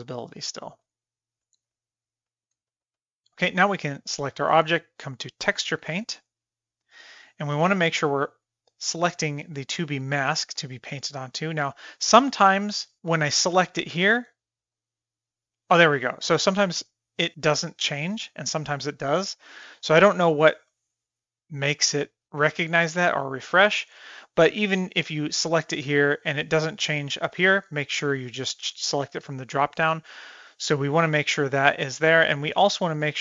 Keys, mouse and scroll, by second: 0.3 shift+middle click, 0.8 click, 1.1 g, 2.4 shift+middle click, 2.7 middle click, 3.3 middle click, 3.8 click, 5.4 click, 8.9 click, 13.4 click, 14.9 click, 15.8 click, 18.9 click, 19.8 shift+middle click, 21.9 click, 25.1 click, 28.0-29.1 drag, 32.6-33.2 drag.